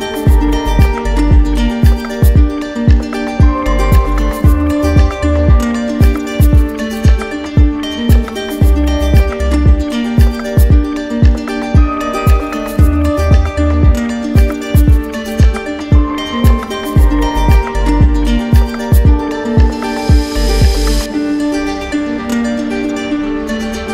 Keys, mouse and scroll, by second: 1.3 click, 2.7 click, 3.9 right click, 5.9 click, 6.9 ctrl+z, 9.1 click, 10.4 click, 12.1 click, 13.4 click, 14.0 click, 14.4 right click, 15.6 click, 16.6 click, 17.6 click, 18.8 click, 19.8 click, 20.5-21.7 drag, 21.7-23.5 right drag.